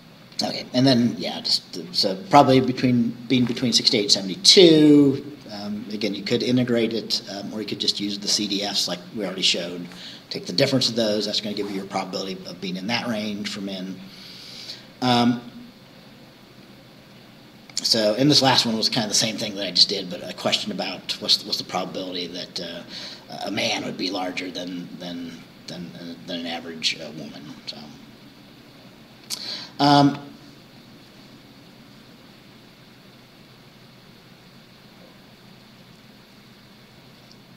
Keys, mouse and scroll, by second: 1.1-1.8 scroll down 4, 13.5-16.4 scroll down 2, 16.4-20.7 scroll down 1, 20.7-27.8 scroll down 1, 27.8-28.3 scroll down 1, 29.2-30.2 scroll down 4.